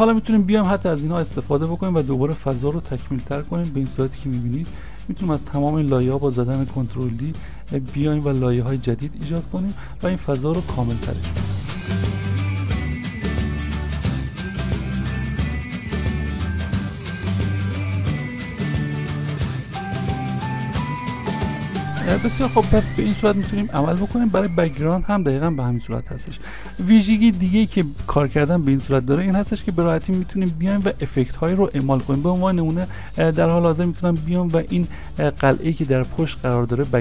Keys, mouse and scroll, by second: 2.6 ctrl+d, 6.0 ctrl+d, 12.0 ctrl+d, 13.5 ctrl+d, 14.6 right click, 19.1 middle click, 20.7 middle click, 23.1 middle click, 24.0-26.2 scroll up 1, 32.8 middle click.